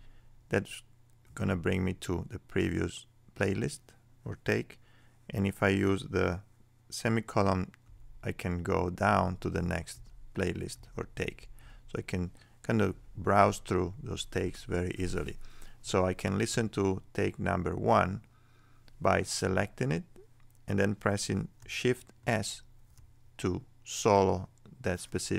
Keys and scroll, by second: 7.8 ;, 9.9 p, 11.2 ;, 12.9 p, 13.9 ;, 14.3 p, 22.2 shift+s.